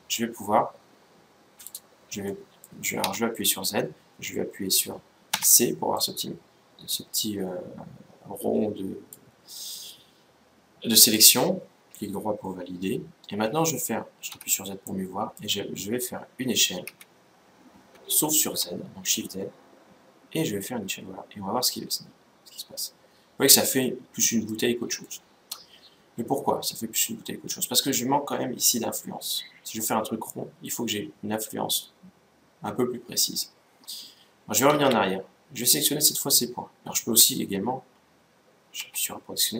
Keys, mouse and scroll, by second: 1.4-3.0 right drag, 2.0-3.8 middle drag, 2.7 z, 5.1 c, 10.9-12.7 right drag, 14.0 z, 14.6-16.5 middle drag, 16.7 s, 24.8-26.4 middle drag, 34.4 ctrl+z, 38.5 a.